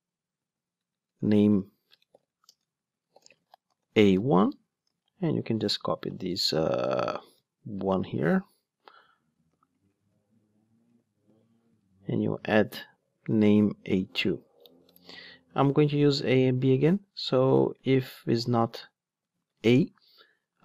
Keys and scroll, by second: 5.6 alt+shift+Up, 7.2 super+z, 10.0 super+x, 11.2 super+v.